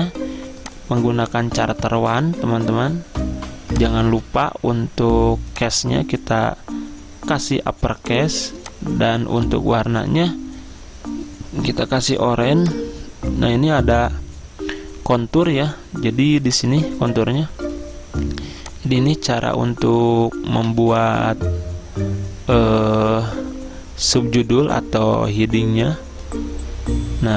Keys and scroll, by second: 2.3-3.1 typing.